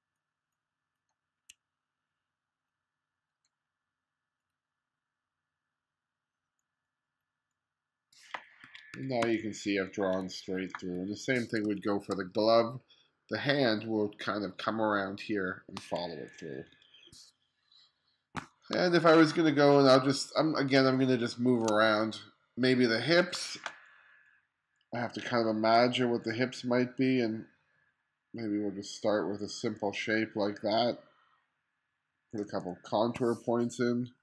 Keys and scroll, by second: 8.7-11.7 typing, 16.4 1, 18.8 space, 32.5 2.